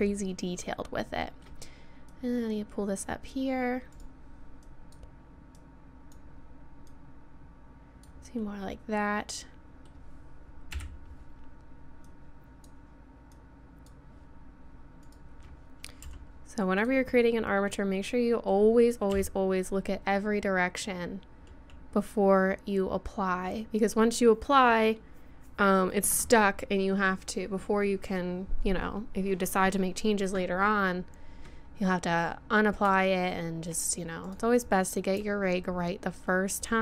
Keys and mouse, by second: 2.1-3.1 drag, 3.2 click, 3.9 right click, 8.3 click, 8.4 middle click, 10.4 middle click, 10.7 KP_1, 11.5-14.2 middle drag, 15.1-16.9 right drag, 16.0 g, 17.3 middle click, 19.1 KP_3, 19.7-22.2 middle drag, 24.0 middle click, 33.4 middle click, 34.3 right click, 36.1 middle click.